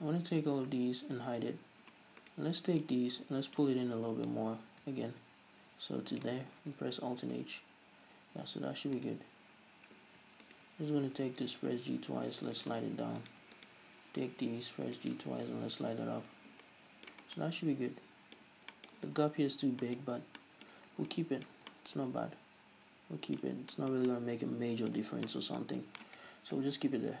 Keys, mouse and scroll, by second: 0.4 scroll up 1, 2.4-3.0 right drag, 3.0-9.2 drag, 7.6-8.4 scroll down 1, 8.4-9.2 scroll up 1, 9.2 right click, 9.5 scroll down 1, 10.6 shift+right click, 11.3 g, 12.8 click, 13.4 right click, 13.7 shift+right click, 14.4 g, 15.3 click, 16.3 Tab, 16.5 scroll down 2, 16.8-27.2 middle drag, 17.4 scroll down 2, 18.6-18.9 scroll up 1, 19.7 scroll up 1, 20.3 Tab, 20.4 scroll down 1, 20.9 scroll up 1, 21.2 Tab, 21.8 Tab, 23.7 scroll down 1, 24.2 Tab, 25.4 scroll down 1, 26.7 KP_3.